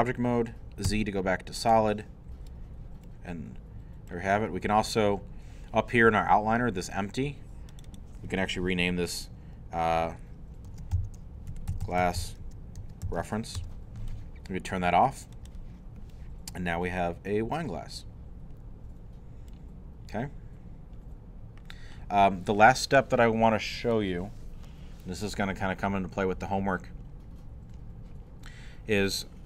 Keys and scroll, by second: 0.9 z, 10.7-13.8 typing, 14.3 Return.